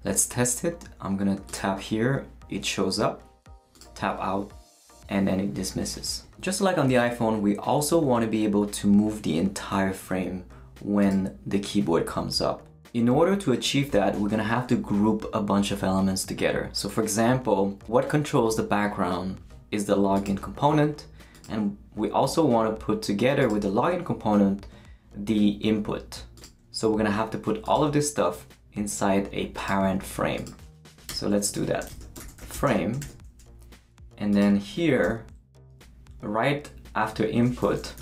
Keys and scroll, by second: 31.1 Return, 31.5 Tab, 31.6-33.5 typing, 35.0 Return, 37.7-38.0 typing.